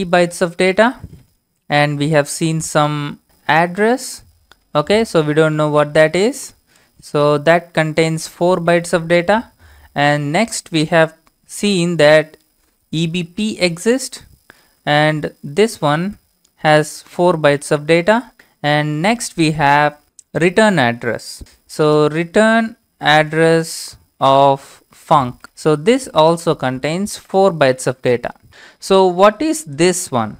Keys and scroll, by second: 0.0-0.7 typing, 1.0 Return, 3.5 shift+/, 4.5 Tab, 4.7 Tab, 5.6 Tab, 5.6 typing, 6.7 -, 7.0 space, 8.2 4, 8.9 Return, 12.9-14.0 typing, 14.3 Tab, 14.7 Tab, 14.8 Tab, 15.5 Tab, 16.4-18.2 typing, 21.6-27.1 typing.